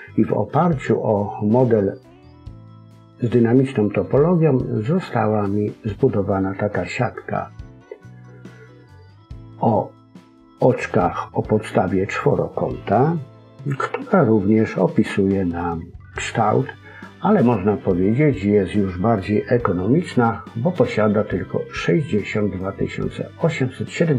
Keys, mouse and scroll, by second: 9.5-12.5 scroll up 1, 13.7-16.8 scroll down 2.